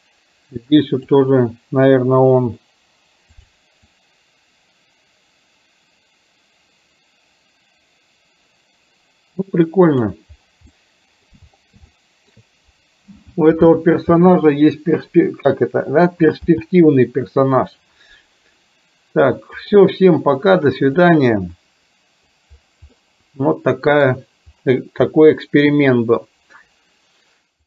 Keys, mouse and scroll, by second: 0.9 click, 2.3 Delete, 3.4 click, 4.0-10.1 drag, 10.8-11.3 middle drag, 12.0-12.4 shift+middle drag, 16.5 n, 19.8 click, 21.1-22.4 drag, 23.0-24.1 middle drag.